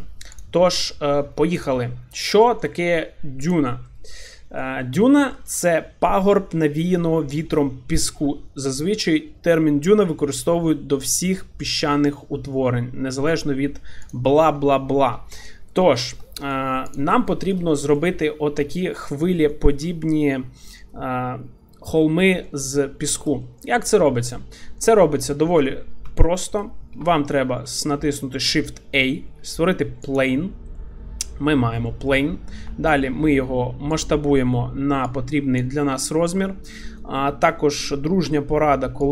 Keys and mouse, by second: 1.6 click, 2.3 middle click, 4.3 middle click, 5.3 shift+middle click, 14.0 click, 16.0 shift+middle click, 16.2 middle click, 16.9 click, 17.2 shift+middle drag, 17.8 middle click, 19.5 shift+middle drag, 20.6 shift+middle drag, 22.4-22.7 shift+middle drag, 23.0 shift+middle click, 23.4 middle click, 24.3 drag, 24.6 shift+middle click, 25.0 middle click, 26.2 shift+middle drag, 27.0 shift+a, 31.9 middle click, 32.6 s, 35.0 click, 36.1 shift+middle click, 36.4 middle click.